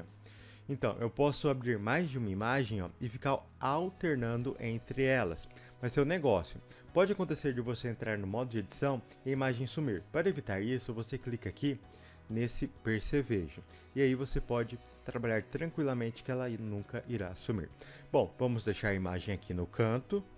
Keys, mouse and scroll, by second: 7.8-9.1 scroll down 2, 9.1-14.4 scroll down 1, 14.4-15.0 scroll down 1, 15.0 click.